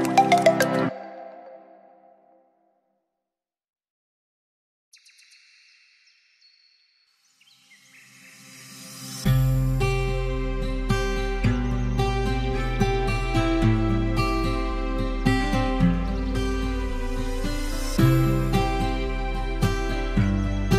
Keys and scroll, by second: 3.5 ctrl+-, 5.8 ctrl+~, 5.9 ctrl+ÿ.